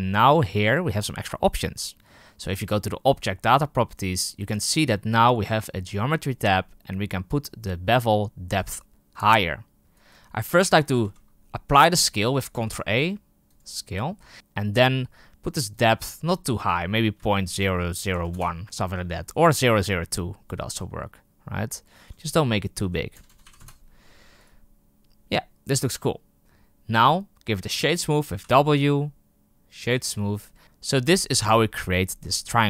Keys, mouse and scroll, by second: 8.6 click, 9.2 click, 13.5 ctrl+a, 14.3-23.5 drag, 23.5 KP_0, 24.3-27.0 right drag, 29.8 w, 30.3 right click.